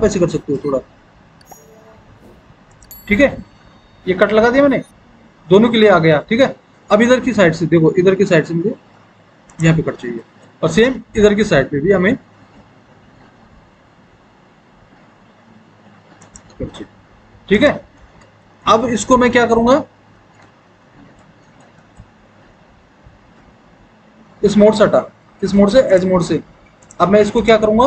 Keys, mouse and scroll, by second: 20.1 alt+w, 20.6 alt+w.